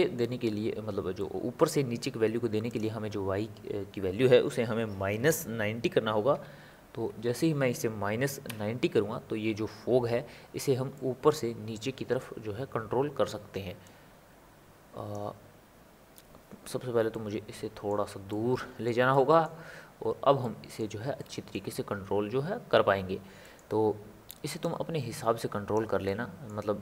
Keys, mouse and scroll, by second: 0.5-1.2 scroll up 2, 1.2-2.7 middle drag, 2.7-5.8 drag, 10.9-13.8 middle drag, 13.8-17.1 drag, 17.1-19.6 ctrl+middle drag, 19.6-20.0 scroll up 2, 20.4 middle click, 20.8-21.2 scroll up 1, 21.2-24.6 middle drag, 24.6-26.0 drag, 26.0-26.8 middle drag.